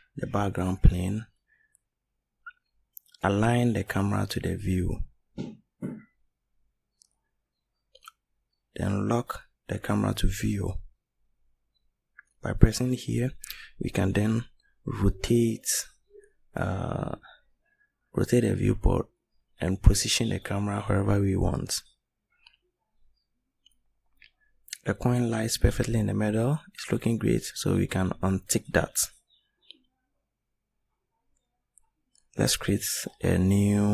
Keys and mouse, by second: 29.6 click, 30.6 click.